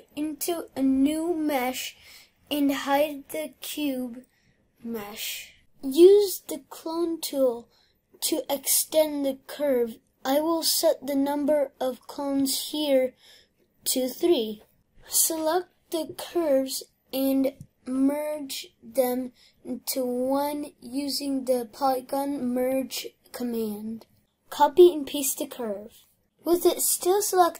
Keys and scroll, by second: 1.9 ctrl+v, 24.2 ctrl+c, 26.2 ctrl+v.